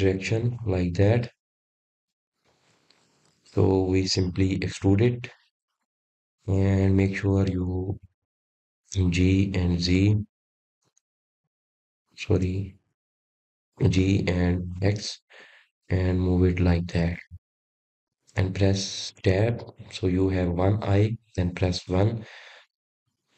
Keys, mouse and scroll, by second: 4.6-5.0 scroll down 2, 5.0-6.5 middle drag, 6.5 scroll up 4, 7.2-10.3 middle drag, 10.3-10.8 scroll down 1, 10.8-12.9 middle drag, 12.9 g, 17.6 g, 20.8 click, 21.3-23.0 middle drag, 23.0 Tab.